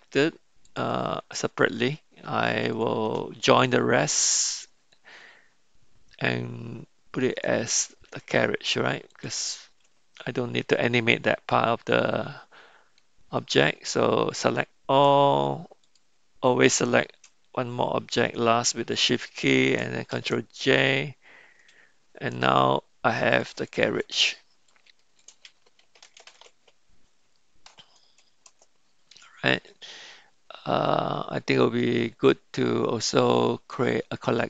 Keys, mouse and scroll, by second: 0.6 shift+click, 2.7 click, 5.0-7.5 drag, 10.4-13.0 middle drag, 15.8 shift+click, 21.3 ctrl+j, 23.3 click, 23.7-29.7 drag, 26.1 r, 33.7 drag.